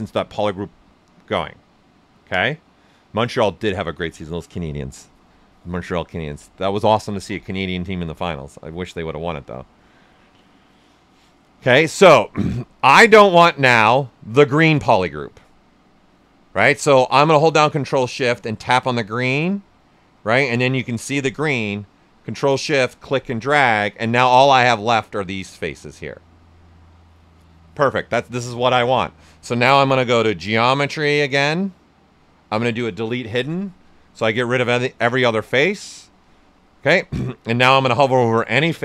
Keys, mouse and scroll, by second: 12.3-14.8 right drag, 18.5 ctrl+shift+click, 22.4-24.0 ctrl+shift+drag, 24.0-29.8 alt+right drag, 29.8-33.3 drag, 32.3 typing, 37.2 right click.